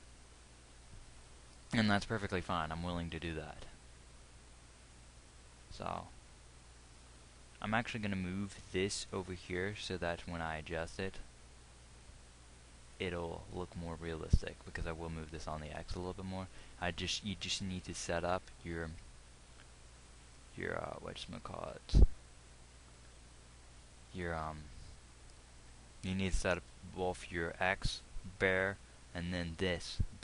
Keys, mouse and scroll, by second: 2.3 g, 17.4 g.